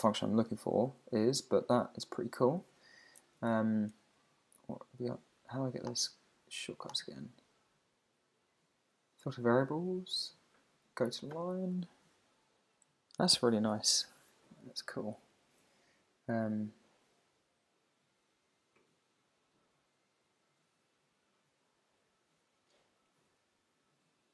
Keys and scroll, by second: 0.5 Down, 1.2 Down, 1.7 Up, 4.6 Down.